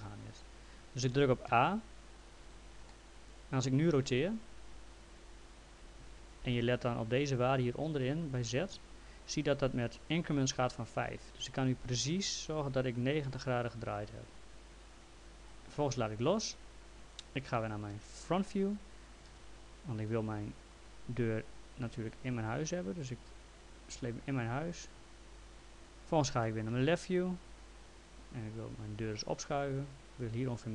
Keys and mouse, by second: 1.5 a, 2.9 alt+middle click, 4.5 click, 6.0 ctrl+click, 6.2 ctrl+z, 9.3 click, 17.9 f, 19.3 w, 20.4 click, 26.7 l, 28.4 click.